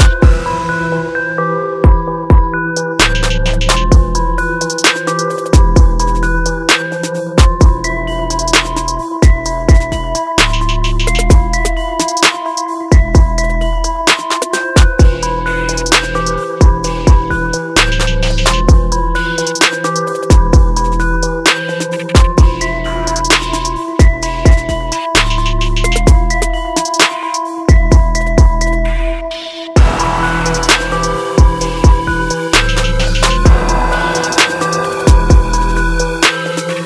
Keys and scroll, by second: 2.6 ctrl+=, 9.3 ctrl+alt+z, 10.3 ctrl+d, 11.1 ctrl+alt+z, 12.1 ctrl+j, 14.2 ctrl+alt+z, 21.0 ctrl+alt+z, 24.6 ctrl+alt+z, 31.3 ctrl+-, 31.7 ctrl+d, 32.2 ctrl+-.